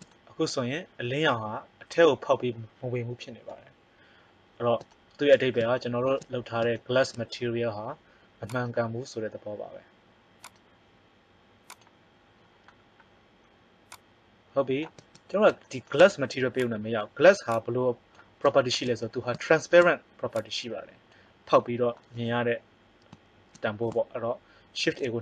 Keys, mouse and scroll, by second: 3.4 KP_0, 8.4 right click, 14.4 click, 16.6 click, 17.6 click, 24.8 shift+a.